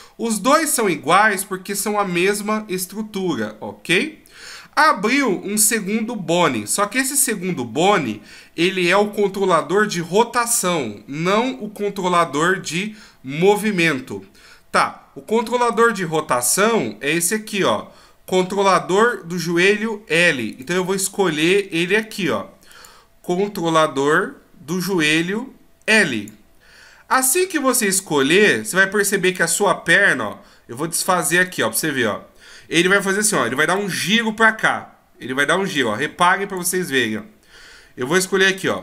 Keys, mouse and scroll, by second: 15.7 right click, 16.3-16.8 scroll up 1, 18.8-19.1 scroll up 1, 20.5 right click, 22.7 click, 26.9-30.1 scroll down 1, 31.4 click, 33.6 d, 33.8 click, 35.8 d, 36.1 d, 36.2 click.